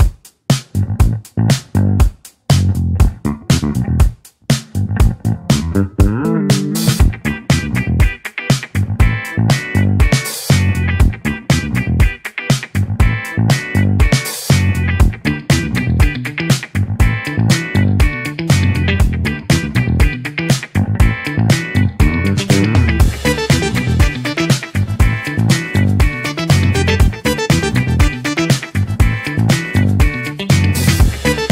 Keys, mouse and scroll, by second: 9.3-10.6 middle drag, 10.6 s, 12.4-13.7 middle drag, 13.7 r, 21.3-24.4 middle drag, 26.4-29.4 drag, 30.9-31.5 right drag.